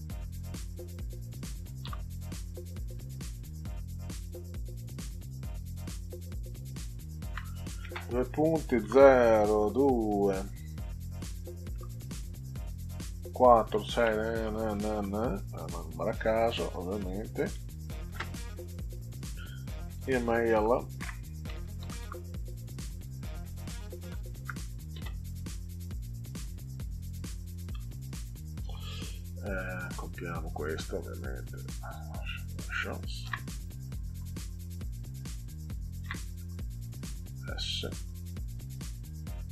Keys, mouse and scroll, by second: 0.5 click, 1.8 ò, 2.3 click, 6.3 shift+-, 8.8 0, 9.5 2, 11.7 -, 13.2-15.5 typing, 18.1 space, 19.9-22.5 typing, 24.2 shift+., 27.7 r, 28.6 BackSpace, 31.4-32.6 drag, 33.2 ctrl+c, 34.1 click, 36.0 ctrl+v, 36.9 click, 38.0 s, 38.8 click.